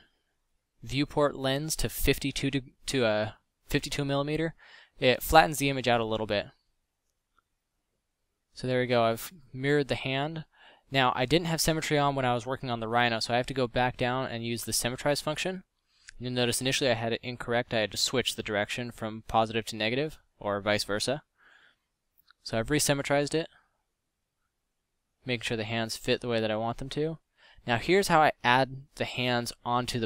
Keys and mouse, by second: 1.0 x, 7.4 a, 9.0 Tab, 9.4 KP_7, 9.8 a, 10.1 Tab, 16.2 ctrl+z, 18.3-18.7 middle drag, 19.0 middle drag, 20.2 a.